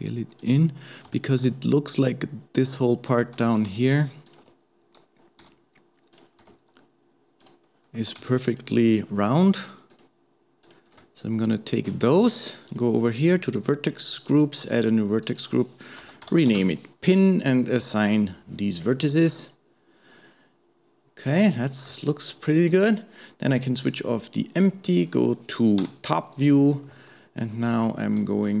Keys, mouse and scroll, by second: 0.8-1.2 scroll up 2, 1.2-3.4 shift+middle drag, 3.4 alt+a, 4.3 alt+shift+click, 5.4 g, 8.5 alt+shift+click, 9.9 alt+shift+click, 10.6 alt+shift+click, 11.3 scroll down 2, 12.7 click, 14.3 click, 15.2-17.9 drag, 18.8-19.1 scroll down 1, 19.1-23.8 middle drag, 23.8 click, 24.8 click, 25.8 KP_7, 26.3-26.7 scroll up 1, 27.1 shift+middle click, 27.9-28.6 scroll down 2.